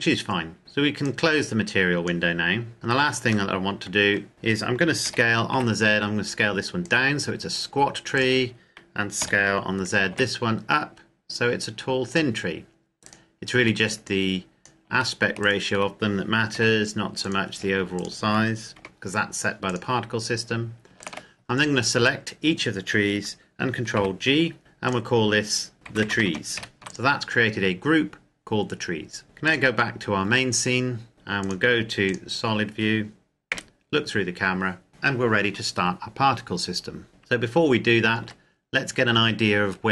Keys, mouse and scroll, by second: 1.0 click, 2.7-3.2 scroll down 1, 3.2 middle click, 4.3 click, 4.7 s, 5.3 z, 6.5 click, 7.9 right click, 9.0 s, 9.9 z, 11.9 click, 12.8 right click, 13.9 click, 15.2 shift+right click, 16.3 g, 17.1 click, 17.8 shift+right click, 18.5 g, 19.5 click, 20.8 shift+right click, 23.7 ctrl+g, 24.7 click, 25.7-26.4 typing, 26.7 click, 29.3 click, 31.2 click, 33.3 KP_0, 37.1 right click, 37.9 Tab, 38.5 Tab.